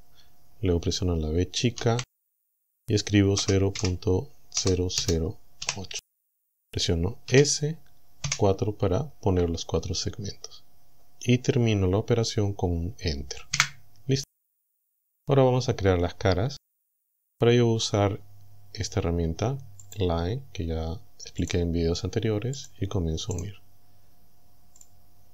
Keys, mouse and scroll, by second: 1.8 v, 3.4 KP_0, 3.8 KP_Decimal, 4.6 KP_0, 5.8 KP_8, 7.3 s, 8.3 KP_4, 13.6 KP_Enter, 17.4-18.5 scroll down 6, 18.5 middle click, 19.9 click, 21.4 click, 22.6 click, 23.4 right click, 24.8 click.